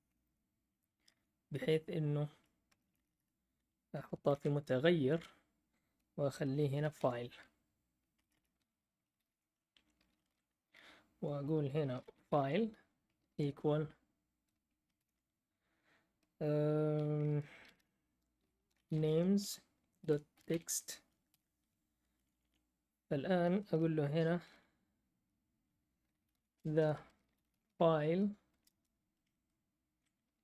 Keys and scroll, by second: 1.1 Right, 1.6-2.3 BackSpace, 2.7 BackSpace, 2.8 BackSpace, 2.9 BackSpace, 4.2 shift+4, 6.4-10.3 typing, 11.7-15.4 typing, 17.4-22.1 typing, 22.3 Down, 26.0-28.6 typing.